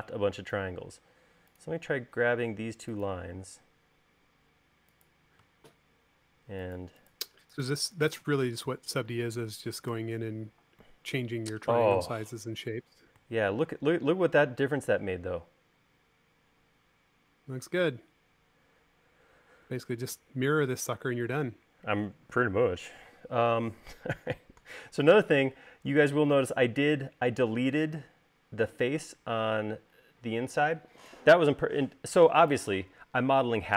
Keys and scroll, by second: 10.3 u, 27.3 space.